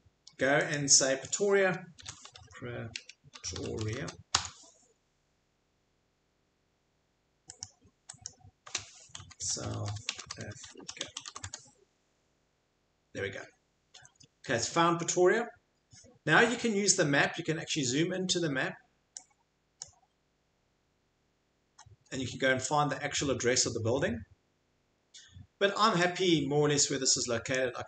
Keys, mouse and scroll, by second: 0.7 click, 1.7-4.5 typing, 2.1 click, 5.6 typing, 7.3-8.1 typing, 7.6 click, 8.2 click, 9.1-11.8 typing, 19.8 click, 21.9 scroll, 22.8 scroll, 24.1 scroll, 27.5 click.